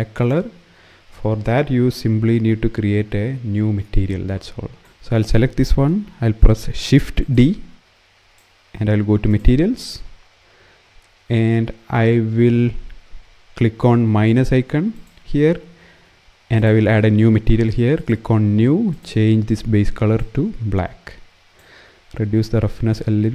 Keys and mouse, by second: 2.7 KP_0, 6.7 shift+d, 6.9 shift+click, 14.6 click, 17.7 click, 22.7 click.